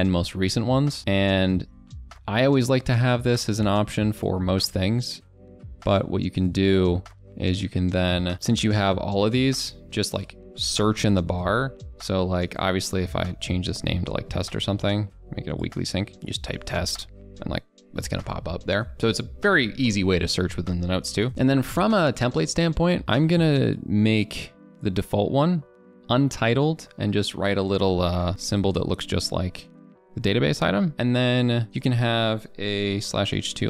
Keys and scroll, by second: 21.0 ctrl+BackSpace.